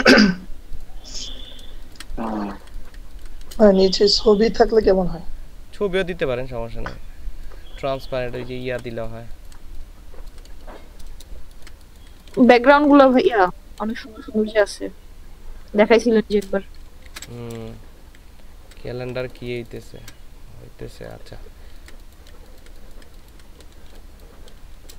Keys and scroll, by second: 1.8 ctrl+space, 3.0 ctrl+space, 8.6 ctrl+space, 9.5 ctrl+space, 12.1 ctrl+space, 17.1 ctrl+alt+shift+s, 21.8 ctrl+space, 22.3 ctrl+space, 23.1 ctrl+space.